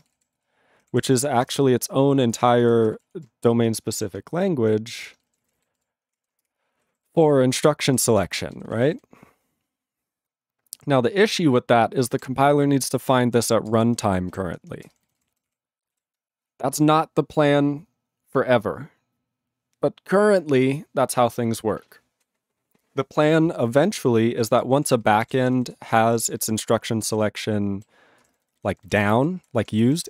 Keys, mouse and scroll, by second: 5.1 ctrl+Return, 6.6 ctrl+Return, 6.9 ctrl+=, 7.8 ctrl+n, 8.1 ctrl+p, 8.2 ctrl+space, 8.2 ctrl+e, 8.6 ctrl+g, 8.6 ctrl+n, 8.7 ctrl+a, 8.8 ctrl+n, 9.7 ctrl+n, 12.2 ctrl+p, 13.7 ctrl+space, 13.7 ctrl+n, 14.3 ctrl+g, 14.5 ctrl+p, 14.8 ctrl+space, 14.9 ctrl+n, 15.1 ctrl+g, 15.3 ctrl+p, 15.9 ctrl+e, 24.4 ctrl+a, 24.7 ctrl+space, 24.9 ctrl+n, 25.0 ctrl+g, 25.2 ctrl+a, 25.4 ctrl+n, 25.6 ctrl+g, 25.9 ctrl+p, 26.0 ctrl+n, 26.4 ctrl+space, 26.5 ctrl+n, 26.8 ctrl+p, 27.0 ctrl+g, 27.1 ctrl+space, 27.2 ctrl+n, 27.8 ctrl+n, 28.2 ctrl+g, 28.3 ctrl+n, 28.9 ctrl+g, 29.0 ctrl+n, 29.3 ctrl+g, 29.5 ctrl+p, 29.6 ctrl+space, 29.7 ctrl+n.